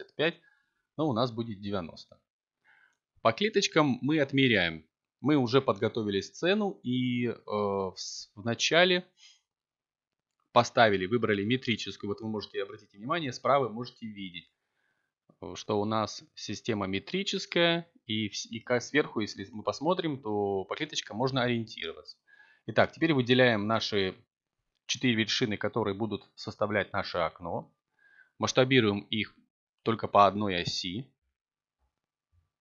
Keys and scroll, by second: 1.7 a, 20.7 7, 24.0 s, 24.5 y.